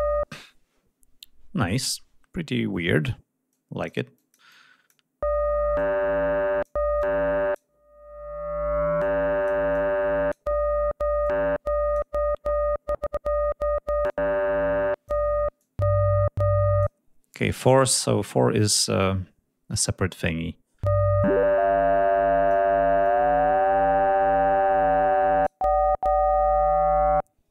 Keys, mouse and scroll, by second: 3.5 click, 4.1 click, 5.7 click, 7.0 click, 9.0 click, 9.7 click, 11.2 click, 14.0 click, 15.6-17.0 drag, 21.2-22.7 drag, 23.0-25.6 drag.